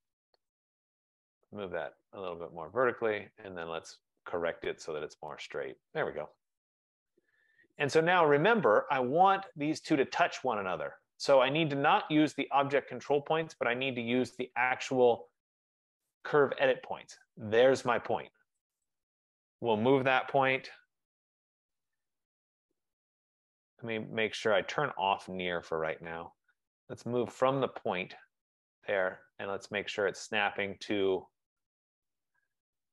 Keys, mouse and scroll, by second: 1.2 click, 2.9 click, 4.0 right click, 4.6 click, 6.2 click, 7.9 right click, 8.8 middle click, 8.8 middle click, 9.6 click, 16.3 click, 18.8 click, 20.3-20.8 typing, 25.8 click, 28.8 click.